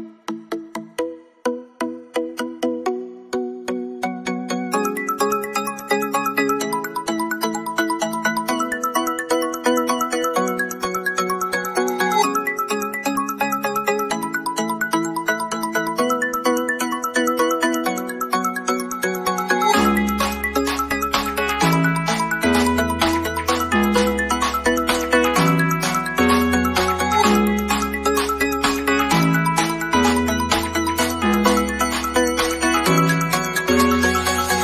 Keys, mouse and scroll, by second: 0.3 scroll up 1, 2.6 scroll down 1, 5.2 click, 7.7 typing, 8.6 click, 12.3 scroll down 1, 16.1 scroll down 1, 16.3 middle click, 17.7 click, 20.7 scroll down 1, 21.7-22.1 shift+scroll down 1, 22.1-28.7 shift+middle drag, 28.7 click, 31.1 click.